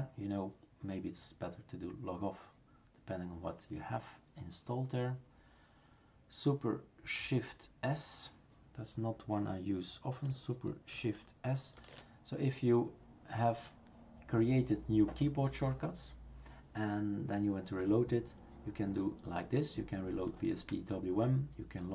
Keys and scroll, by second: 11.8 shift+super+s.